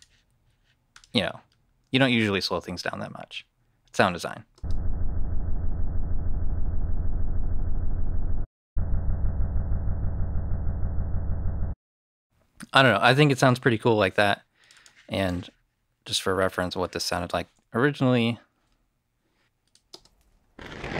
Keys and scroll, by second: 4.4 space, 8.2 space, 11.5 space, 17.0 i, 19.8 space.